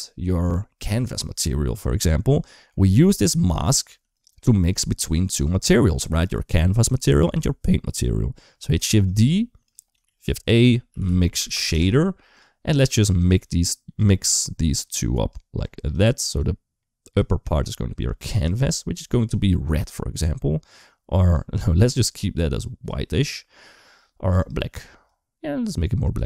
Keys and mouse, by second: 2.5 middle click, 3.1 click, 3.7 g, 4.3 middle click, 5.0 click, 5.4 middle click, 6.2 middle click, 8.6 shift+d, 9.8 shift+a, 13.2 click, 14.0 click, 14.2 click, 15.2 click, 16.2 click, 18.2 click, 24.2 click.